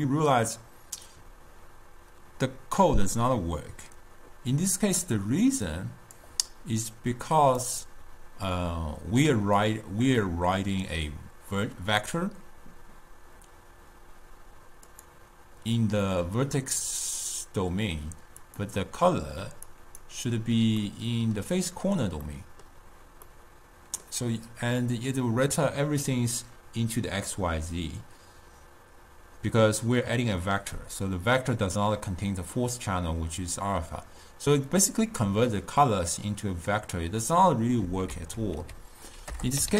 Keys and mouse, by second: 0.4-3.4 middle drag, 5.5-11.4 drag, 15.0-18.2 drag, 18.7-21.2 drag, 21.2-26.6 middle drag, 38.4 ctrl+a.